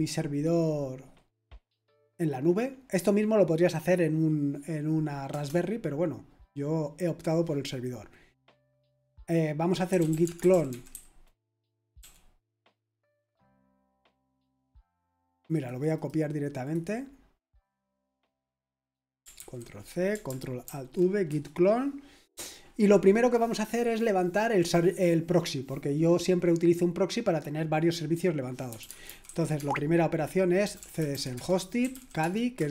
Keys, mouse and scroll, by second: 5.3 Return, 9.6-12.0 typing, 13.2 click, 15.0 click, 15.9 right click, 16.6 click, 18.5 click, 19.4 ctrl+c, 20.6 ctrl+alt+v, 21.3 Return, 28.4-32.7 typing.